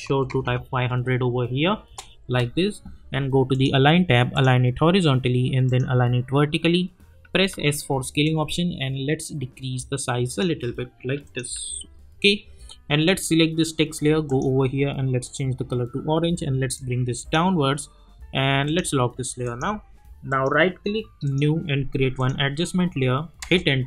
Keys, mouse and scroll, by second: 0.0 click, 1.8 Return, 3.5 click, 7.5 s, 8.2-10.4 drag, 11.8 u, 13.0-17.3 drag, 20.3 right click, 21.2 click, 23.4 Return.